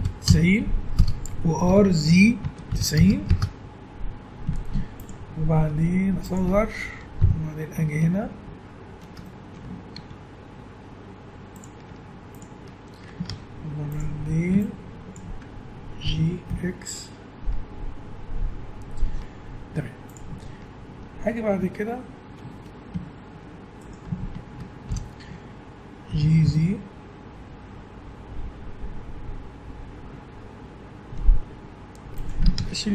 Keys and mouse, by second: 1.7 r, 4.5 z, 5.5 s, 7.2 KP_1, 8.7 click, 8.9 middle click, 9.9 s, 11.9 Tab, 13.3 ctrl+Tab, 14.2 a, 16.1 g, 22.5 a, 23.8-24.9 drag, 24.9 ctrl+l, 26.1 g, 32.6 ctrl+Tab.